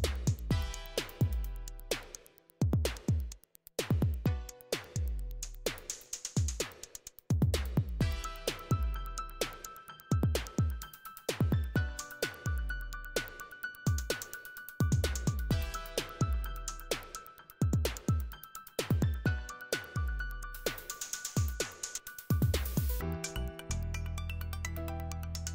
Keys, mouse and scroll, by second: 4.8-11.7 drag, 15.9-17.6 scroll down 1, 17.6-19.8 scroll up 1, 19.8-21.1 scroll up 1, 21.1 click, 22.8 click, 23.8-25.0 right drag.